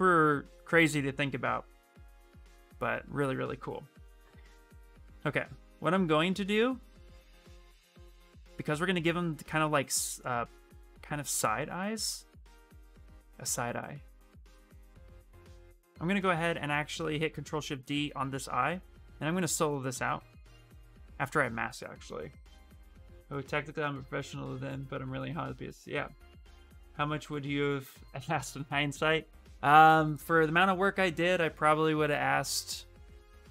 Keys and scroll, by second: 17.1 ctrl+shift+d.